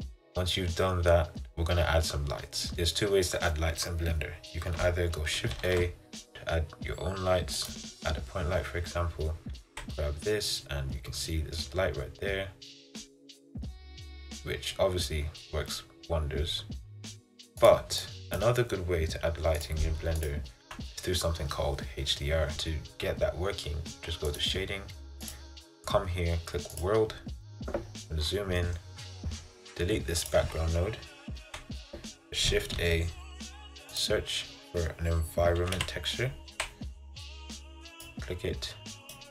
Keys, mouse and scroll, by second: 2.7 Tab, 7.8 shift+a, 9.8 g, 18.5 click, 19.8 click, 20.4 click, 20.8 Delete, 24.4 click, 31.6 Delete.